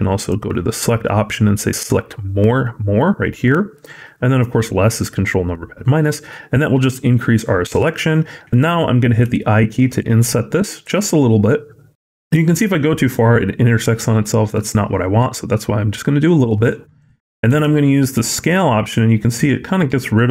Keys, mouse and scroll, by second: 0.0 click, 9.1 i, 17.4 s.